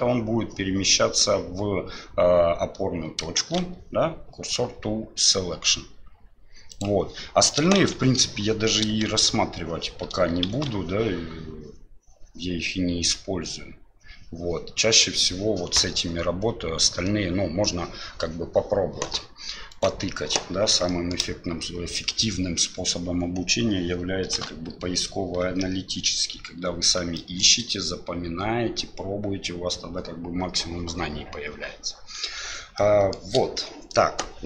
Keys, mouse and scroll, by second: 3.4 shift+s, 7.8 shift+a, 9.0 shift+a, 10.5 shift+s, 20.9 shift+middle drag, 27.1 shift+middle click, 32.8-33.1 shift+middle drag.